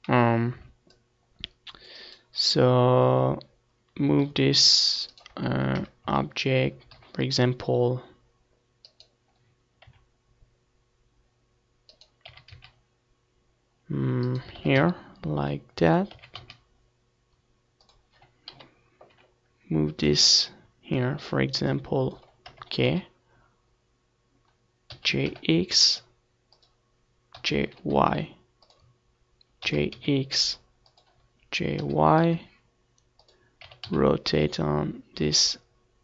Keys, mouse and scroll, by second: 0.6-2.5 right drag, 2.8 g, 3.6-5.3 right drag, 4.4 KP_0, 4.5 z, 5.5 g, 7.7-9.4 right drag, 8.5 r, 10.7-12.2 right drag, 10.9 r, 12.9-14.7 right drag, 13.1 r, 14.5-16.3 drag, 14.7 r, 16.4-18.0 drag, 16.9 KP_7, 17.5 z, 18.5-22.0 drag, 20.9 KP_0, 21.3 z, 23.4 g, 25.1-26.9 drag, 25.8 g, 26.9 middle click, 27.2-28.8 drag, 28.1 g, 29.4-31.0 drag, 30.2 g, 31.7-33.3 drag, 32.0 r.